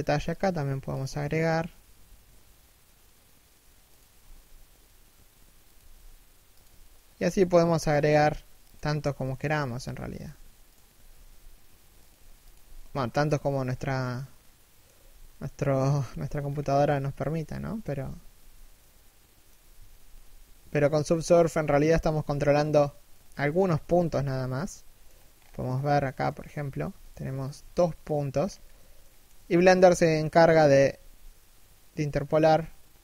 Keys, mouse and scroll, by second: 6.4 a, 6.9 k, 8.5 a, 9.0 alt+right click, 9.3 s, 10.4 alt+right click, 10.8 s, 13.4-13.7 scroll down 1, 13.7 middle click, 14.6 3, 14.9 1, 15.5 scroll up 1, 16.3 z, 16.7 shift+middle click, 17.0 z, 18.4 middle click, 19.2 a, 19.5 3, 19.8 KP_1, 20.5 alt+right click, 20.7 z, 20.9-21.3 scroll down 1, 21.3 alt+shift+middle click, 22.9-23.2 scroll up 1, 23.2 right click, 23.3 g, 23.8 middle click, 25.0 scroll up 1, 25.4 middle click, 26.3 g, 27.0 shift+right click, 27.2 g, 28.0-28.6 scroll up 1, 28.6 shift+middle click, 30.0 z.